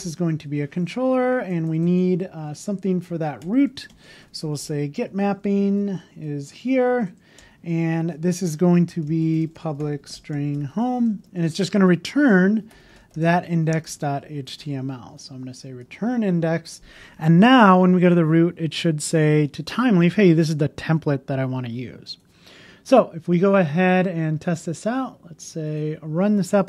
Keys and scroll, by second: 0.8 Return, 0.9 Left, 1.2 Down, 1.7 alt+Right, 2.8 Right, 3.1 Left, 3.9 Up, 4.3 shift+@, 5.5 Return, 5.6 shift+(, 6.9 Right, 11.0 shift+), 11.1 shift+space, 15.9 super+s, 15.9 super+s.